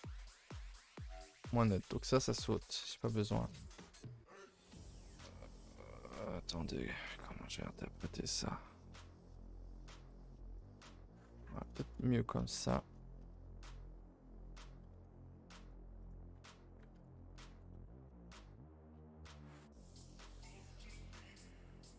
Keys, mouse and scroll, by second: 1.1 2, 1.2 click, 2.1 ctrl+Delete, 2.4 a, 2.6 a, 2.8 1, 3.1 middle click, 4.0 a, 4.1 a, 7.3 middle click, 8.1 l, 12.3 middle click, 13.2 a, 13.4 a, 14.9 2, 15.6 click, 16.0 click, 16.9 ctrl+Delete, 17.3 a, 17.5 a, 17.7 middle click, 18.0 1, 18.2 click, 20.1 middle click, 21.0 middle click, 21.6 g.